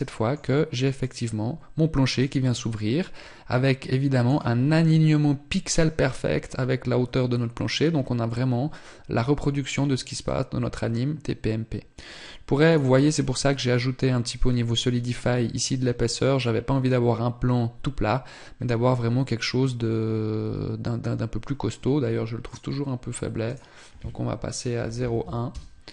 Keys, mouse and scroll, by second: 0.5 click, 6.8 click, 12.2 right click, 12.6 scroll up 2, 15.7 scroll up 1, 22.0 click.